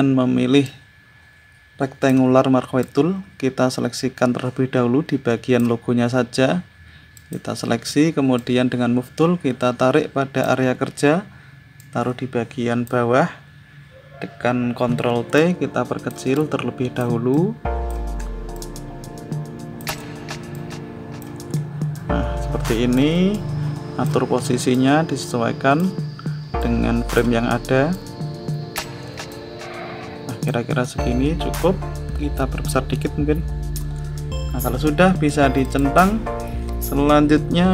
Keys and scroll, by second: 14.8 ctrl+t.